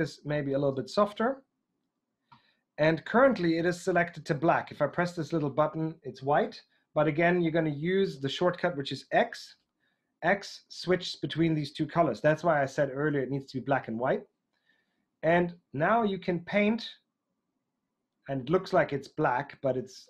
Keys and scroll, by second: 2.0 typing, 9.3 x, 13.7 x.